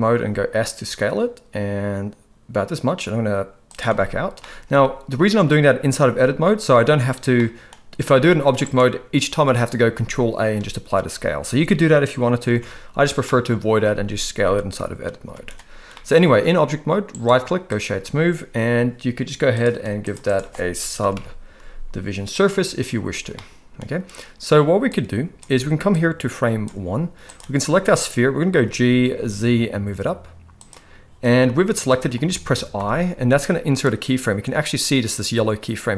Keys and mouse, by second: 0.1 s, 3.8 Tab, 4.3-4.7 middle drag, 7.4 middle click, 8.0 s, 9.9 ctrl+a, 12.5 Tab, 13.3 middle click, 15.3 Tab, 15.9-16.3 middle drag, 17.1-17.8 right drag, 19.5 click, 20.1-22.5 drag, 23.4 middle click, 25.0-26.6 drag, 27.3-27.9 drag, 28.5 g, 31.9 shift+middle drag, 32.8 i.